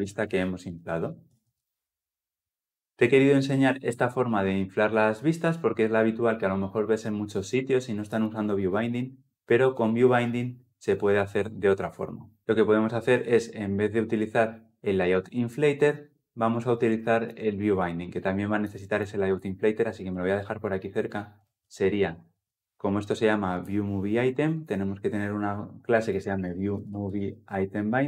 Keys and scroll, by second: 0.4 Escape, 1.0 ctrl+alt+l, 1.2 ctrl+alt+o.